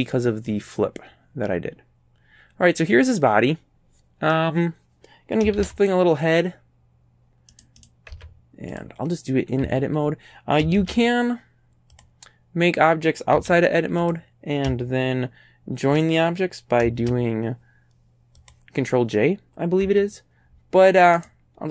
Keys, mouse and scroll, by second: 0.0 scroll down 1, 0.5-4.5 middle drag, 5.6 shift+a, 7.6 right click, 7.9 right click, 8.2 Tab, 8.8 click, 9.7 a, 10.8 shift+a, 12.0 click, 13.4 x, 14.1 click, 17.0 shift+a, 18.4 click, 19.9 Tab, 21.2 right click.